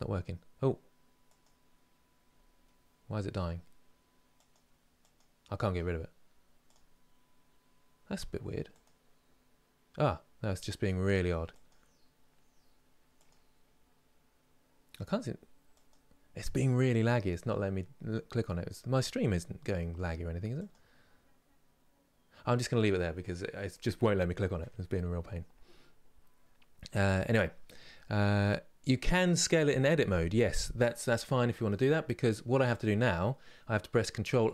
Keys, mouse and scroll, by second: 22.9 click, 32.4 click, 34.0 ctrl+a.